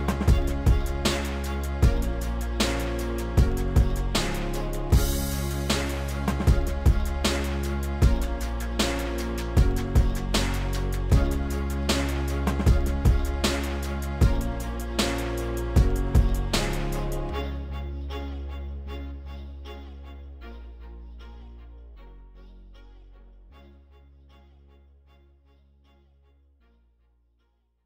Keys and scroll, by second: 0.0-1.2 typing, 11.0 s, 14.3 s.